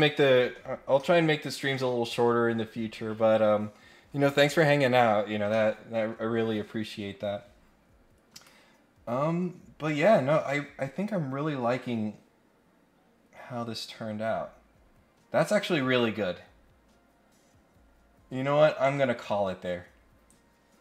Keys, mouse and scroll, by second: 8.3 click.